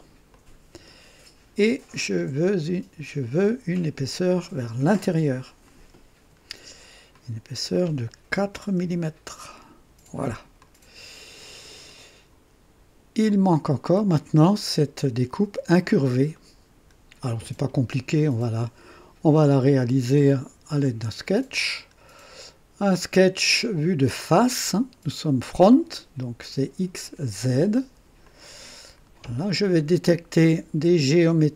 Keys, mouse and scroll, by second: 0.3 click, 5.6 click, 7.1 click, 8.4 KP_4, 8.7 KP_Enter, 8.7 Return, 10.6-12.1 drag, 13.2 click, 16.3-16.9 right drag, 21.5 click, 24.2 click, 28.2 click.